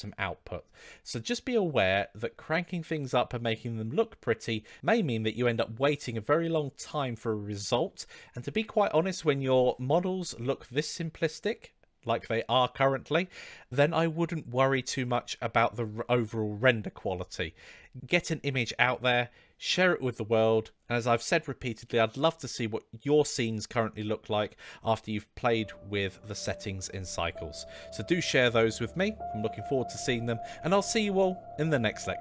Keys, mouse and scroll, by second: 11.0-11.4 middle drag, 12.2-12.6 middle drag, 13.5-14.1 middle drag.